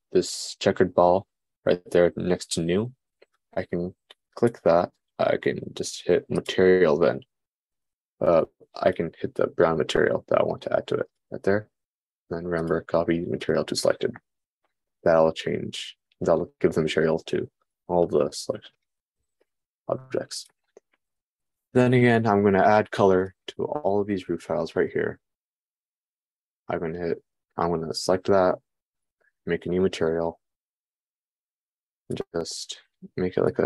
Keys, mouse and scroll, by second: 5.0-9.4 drag, 13.3-18.3 drag, 18.3-19.3 middle drag, 19.3 click, 19.5-25.3 middle drag, 25.3 shift+click, 25.6-29.8 shift+middle drag, 29.8-33.0 drag, 33.0-33.6 middle drag.